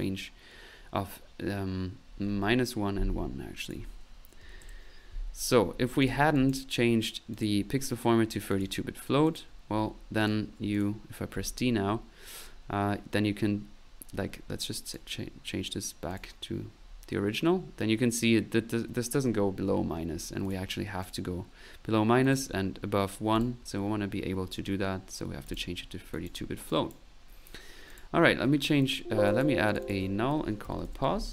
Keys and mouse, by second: 3.6 click, 5.6 middle click, 6.0 click, 7.3 click, 8.5-9.6 drag, 9.6 middle click, 10.2 click, 10.7 click, 11.3 d, 14.9 click, 16.1 click, 20.4 click, 21.0 click, 22.2 click, 23.0 middle click, 23.3 click, 24.1 middle click, 25.5 click, 26.1 click, 26.7 click, 27.9 click, 28.6 alt+n, 28.8 alt+click, 29.3 alt+click, 29.7 alt+click.